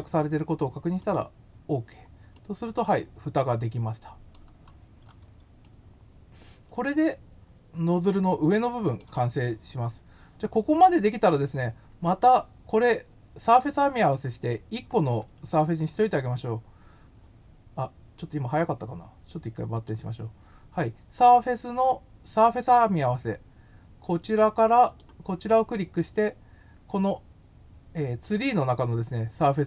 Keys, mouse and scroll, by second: 0.9 click, 2.3-4.3 middle drag, 4.6 scroll, 5.6-7.2 middle drag, 13.4 click, 19.7 click, 24.8 click.